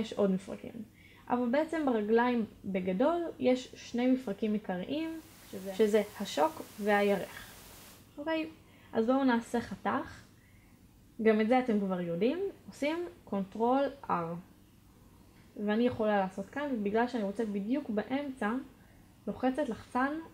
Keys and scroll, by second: 11.8 ctrl+r.